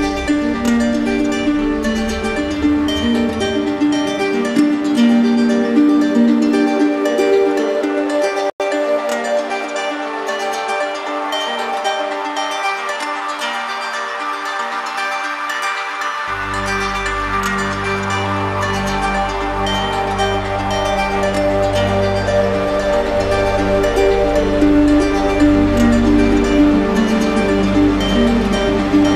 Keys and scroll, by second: 16.5 ctrl+alt+z.